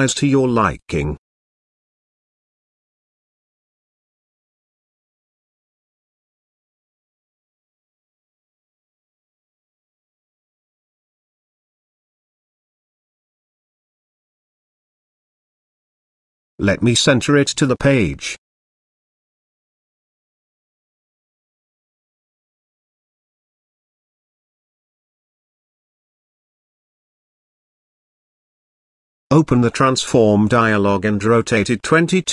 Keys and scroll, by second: 9.6-10.8 typing, 11.3 Return, 24.4 3, 25.3 -.